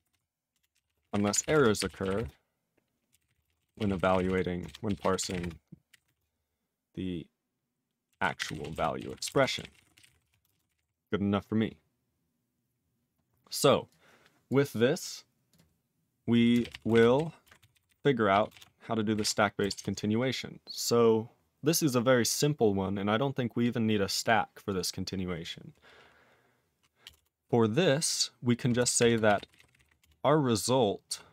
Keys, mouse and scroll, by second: 0.0-6.5 typing, 7.8-10.7 typing, 10.7 ctrl+e, 13.9 click, 14.5 click, 15.5 click, 15.5 click, 16.6 ctrl+a, 16.7 ctrl+p, 16.9 ctrl+space, 16.9 ctrl+e, 16.9 ctrl+n, 17.1 ctrl+g, 17.7 ctrl+n, 17.9 ctrl+n, 18.3 ctrl+e, 18.5 ctrl+space, 18.5 ctrl+a, 19.1 ctrl+g, 19.2 ctrl+e, 19.7 ctrl+s, 21.0-21.6 scroll down 1, 21.6-23.6 scroll down 2, 23.6 click, 24.1 click, 24.2 click, 24.3 click, 24.7 click, 24.7 click, 27.1 Return, 27.1 Return, 28.8-30.3 typing.